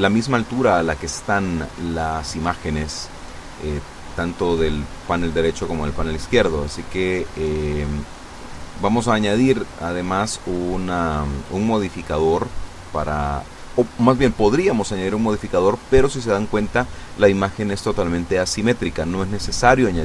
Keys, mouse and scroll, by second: 3.4 click, 4.1 click, 4.4 middle click, 6.8 click, 18.2 a, 18.9 b, 19.5 click.